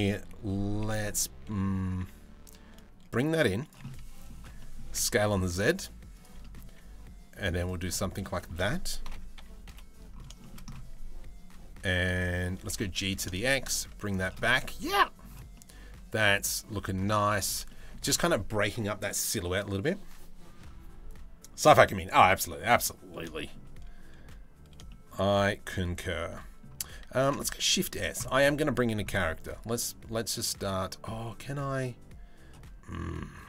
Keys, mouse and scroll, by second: 0.4 KP_7, 1.6 e, 3.4 middle click, 4.2 middle click, 4.5 s, 6.0 middle click, 6.3 e, 8.0 shift+middle click, 8.6 ctrl+l, 9.0 KP_3, 9.3 KP_1, 10.0 shift+middle click, 12.2 g, 14.0-14.8 middle drag, 14.2 Tab, 15.1-16.6 middle drag, 17.3 shift+middle drag, 22.4 middle drag, 25.0 middle drag, 25.9 middle drag, 27.1 ctrl+s, 29.0 click.